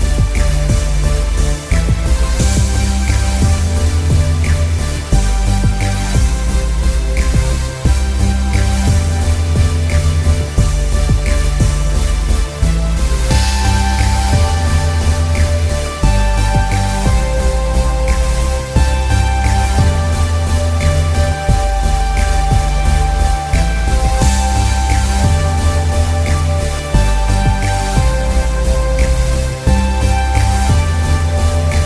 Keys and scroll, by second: 3.6 b, 6.2 ctrl+alt+z, 9.6 ctrl+t, 12.1 ctrl+Return.